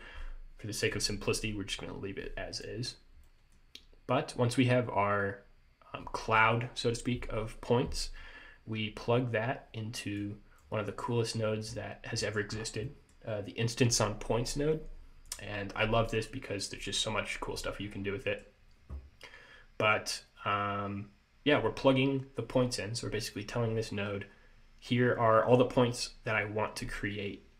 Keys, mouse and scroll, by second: 2.7 click, 3.4 middle click, 10.3 click, 12.3 middle click, 12.7 scroll up 2, 13.0 middle click, 15.4 click, 16.4 click, 18.0-18.3 scroll down 2, 18.3 middle click.